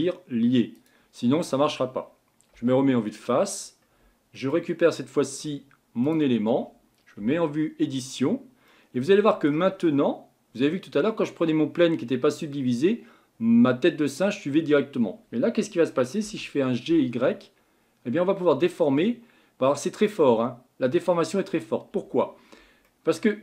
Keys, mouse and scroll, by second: 0.7 click, 1.3-2.5 scroll down 3, 2.5 KP_1, 3.5-3.8 scroll up 4, 4.5-6.0 shift+middle drag, 6.0 click, 7.2 Tab, 8.7-9.7 middle drag, 9.7-12.7 scroll down 1, 16.2 g, 22.4-22.8 scroll down 3, 22.8-23.4 middle drag.